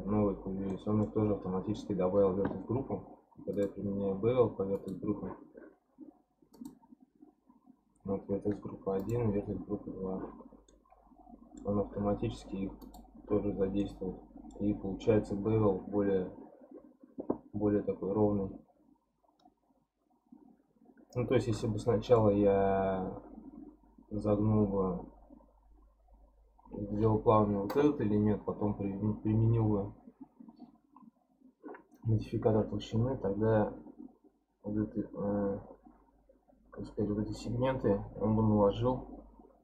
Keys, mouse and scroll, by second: 3.5 click, 4.7 click, 6.5-9.4 drag, 9.4-10.0 scroll down 1, 10.0-10.7 scroll down 1, 10.7-11.7 middle drag, 11.7-12.8 scroll up 2, 12.8 click, 13.5 scroll up 1, 13.8-16.8 middle drag, 17.6-19.2 scroll down 3, 19.2 scroll down 1, 19.3-19.9 scroll up 1, 19.9-21.1 scroll up 3, 21.1-21.6 scroll up 1, 21.6-24.6 middle drag.